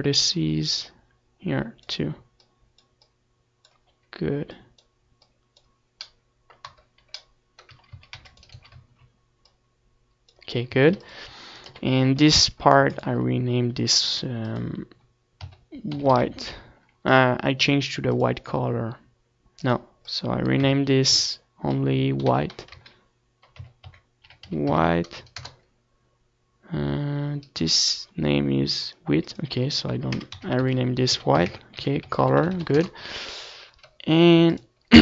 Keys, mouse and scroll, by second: 2.2 KP_Decimal, 4.1-5.8 drag, 6.2-10.7 drag, 7.6-10.1 right drag, 11.6 z, 11.8 a, 12.0 c, 12.5-14.1 right drag, 12.6 z, 13.3-15.0 drag, 14.6 Tab, 14.8 ctrl+s, 15.5 KP_7, 16.5-17.9 middle drag, 16.7 ctrl+s, 17.9-29.7 drag, 31.9-35.0 right drag.